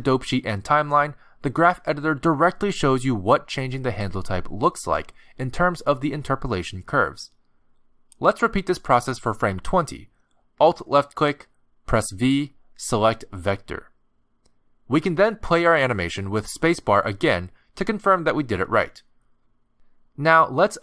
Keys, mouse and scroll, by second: 10.8 alt+click, 12.3 v, 17.0 click, 17.5 space, 19.4 space, 20.4 click.